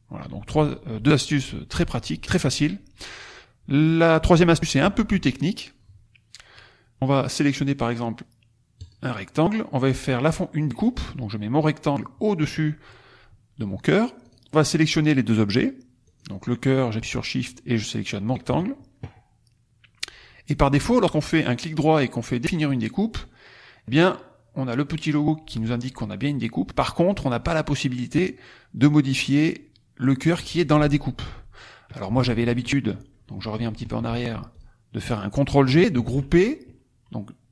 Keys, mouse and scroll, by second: 0.1-0.6 scroll down 2, 8.7 click, 10.0-12.1 drag, 14.1 click, 16.1 click, 17.4 shift+click, 20.8 right click, 22.6 click, 28.1 click, 31.9 ctrl+click, 32.2 ctrl+z, 33.5 ctrl+z, 34.5 ctrl+click, 35.9 ctrl+g.